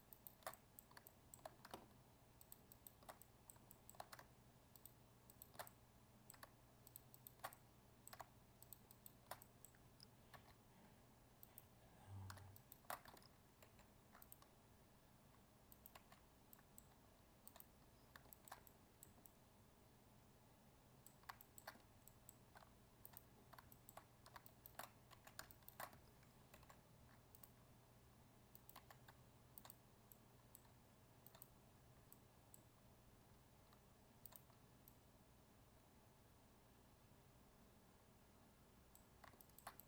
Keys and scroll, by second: 13.6 ctrl+e, 26.5 ctrl+e.